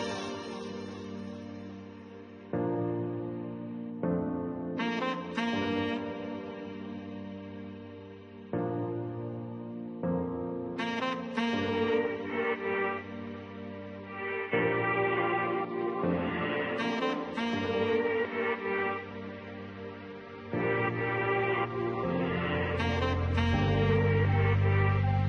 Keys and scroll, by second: 25.1 7.